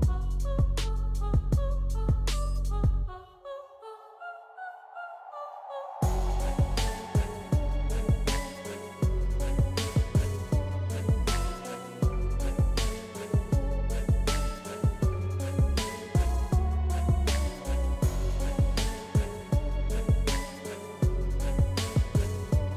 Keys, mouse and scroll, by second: 0.2 ctrl+c, 0.9 click, 5.7 ctrl+v, 7.9-14.0 drag, 10.7 typing, 14.0 ctrl+scroll up 1, 16.2 space, 16.5 click, 16.6 space, 19.2 typing, 19.6-22.7 drag.